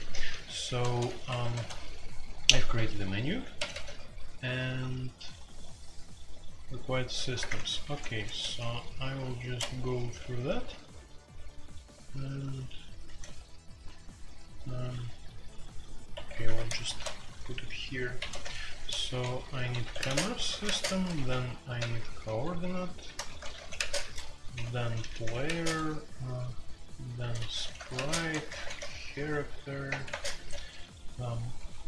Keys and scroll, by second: 0.0-3.7 typing, 6.7-7.2 typing, 7.4 Return, 7.7 Escape, 8.4 ctrl+d, 9.0 ctrl+d, 10.0-10.5 typing, 13.0-15.6 typing, 16.1 Escape, 16.4 alt+2, 16.8 shift+a, 18.2-25.4 typing, 27.1-31.8 typing.